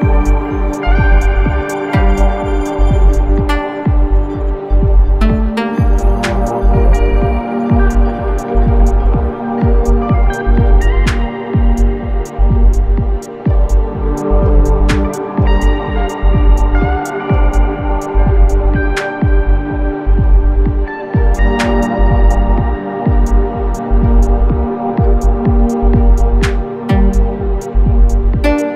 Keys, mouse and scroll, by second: 1.7-5.6 shift+drag, 8.1-10.4 shift+drag, 10.4-12.9 ctrl+drag, 12.9-18.6 ctrl+drag, 13.2 typing, 20.9-28.1 drag, 20.9 typing.